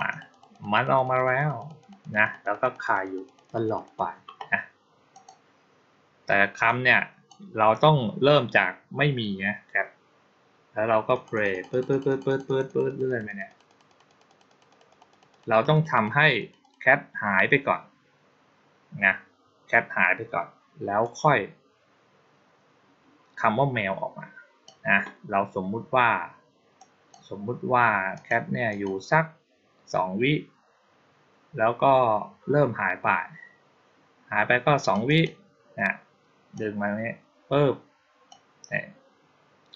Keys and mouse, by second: 0.0 click, 0.2 click, 0.4 click, 0.6 click, 0.8 click, 1.0 click, 1.2 click, 1.4 click, 1.7 click, 1.9 click, 2.1 click, 2.3 click, 2.5 click, 2.7 click, 2.9 click, 3.1 click, 3.3 click, 3.5 click, 3.7 click, 5.0 click, 6.5-7.1 drag, 11.0 click, 11.2 click, 11.4 click, 11.6 click, 11.8 click, 11.9 click, 12.1 click, 12.3 click, 12.5 click, 12.7 click, 12.9 click, 13.1 click, 13.3 click, 13.5 click, 13.7 click, 13.9 click, 14.1 click, 14.3 click, 14.5 click, 14.7 click, 15.0 click, 15.2 click, 15.4 click, 15.6 click, 15.8 click, 16.0 click, 16.2 click, 16.5 click, 20.9-24.5 drag, 26.6-27.0 drag, 28.0 click, 28.6 click, 34.7 click, 34.9 click, 36.4-38.1 drag.